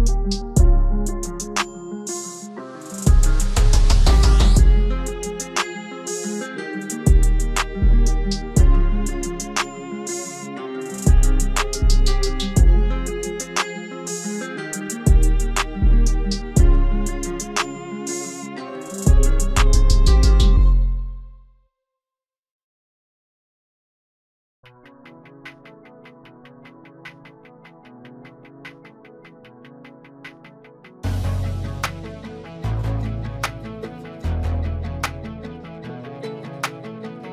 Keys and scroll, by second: 14.0 ctrl+s.